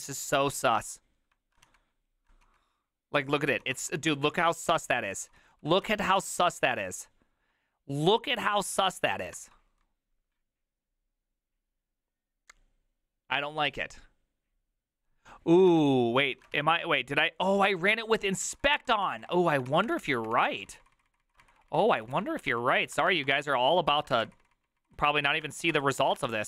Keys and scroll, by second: 0.8 ctrl+a, 1.7-4.3 typing, 4.5 ctrl+u, 5.4 ctrl+u, 5.9 ctrl+u, 5.9 typing, 15.7 alt+[, 16.4 alt+{, 16.4 ctrl+a, 16.6 3, 18.5 ctrl+c, 18.7 ctrl+c, 18.8 ctrl+c, 19.0 Up, 19.1 ctrl+Left, 19.3 ctrl+Left, 19.7 ctrl+c, 19.9 Up, 20.0 Up, 20.3 Up, 20.5 Down, 20.7 ctrl+Left, 21.1 ctrl+Left, 21.4 ctrl+Left, 22.5 Left, 22.5 ctrl+w, 23.0 BackSpace, 23.1 BackSpace, 23.2 BackSpace, 23.3 Return, 23.9 ctrl+c, 24.1 Up, 24.3 ctrl+Left, 24.5 ctrl+Left, 24.7 ctrl+Left, 25.2 Left, 25.5 space, 25.8 Return, 26.1 ctrl+a, 26.3 4.